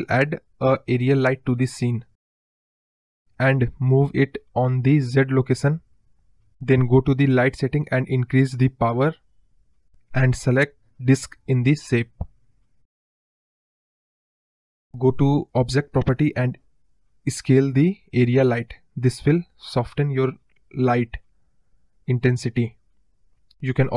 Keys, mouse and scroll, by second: 3.6-6.0 drag, 8.0-9.5 drag, 9.9 click, 10.5 click, 11.2 KP_0, 13.8-15.3 drag, 16.2 click, 16.9 click, 19.2 click, 20.6-22.1 drag.